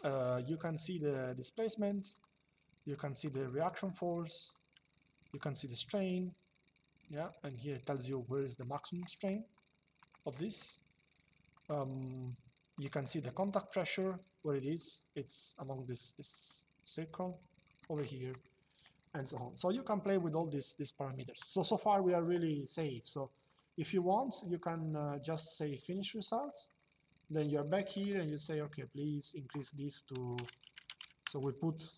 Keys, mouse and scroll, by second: 0.8 click, 2.9 click, 4.2 click, 9.1 shift+middle click, 11.3 click, 12.4 click, 13.8 shift+middle click, 16.0 middle click, 19.9 shift+middle click, 23.2 click, 25.5 click, 26.2 middle click, 27.6 click, 29.9 Right, 31.0 KP_0.